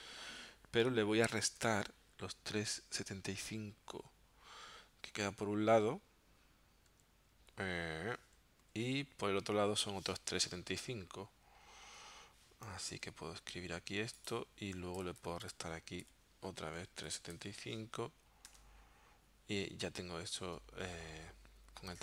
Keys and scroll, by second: 1.6 -, 6.9 3, 7.3 ,, 8.6 7, 10.3 5, 12.9 Tab, 15.0 BackSpace, 16.1-17.6 typing, 18.5 Tab.